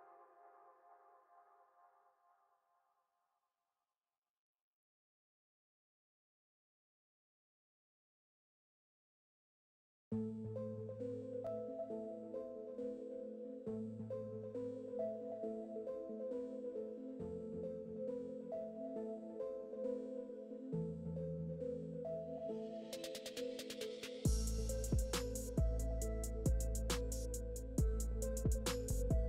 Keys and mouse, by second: 1.0 ctrl+r, 1.7 KP_7, 2.1 Tab, 2.7 Tab, 2.7 KP_7, 3.2 g, 3.4 g, 3.8 g, 5.0-6.7 typing, 7.2 right click, 7.4 click, 7.6 ctrl+KP_1, 8.6 ctrl+KP_1, 8.7 Tab, 8.9 ctrl+KP_3, 9.3-12.7 typing, 9.9 ctrl+z, 13.5 ctrl+r, 13.7 s, 13.8 g, 14.2 click, 14.5 s, 14.7 g, 15.2 ctrl+z, 15.3 ctrl+z, 15.6 ctrl+r, 15.8 ctrl+r, 16.7 ctrl+r, 18.4 ctrl+r, 18.5 s, 19.3 ctrl+r, 19.4 s, 22.2 Tab, 22.6 ctrl+KP_1, 22.8 Tab, 22.9 Tab, 23.0 g, 24.2 g, 24.6 Tab, 24.8 ctrl+z, 25.5 ctrl+KP_1, 27.0 g, 27.1 g, 27.5 Tab, 27.6 e, 27.7 Tab, 27.9 ctrl+z, 28.1 ctrl+z, 28.1 Tab, 28.4 Tab, 28.6 2.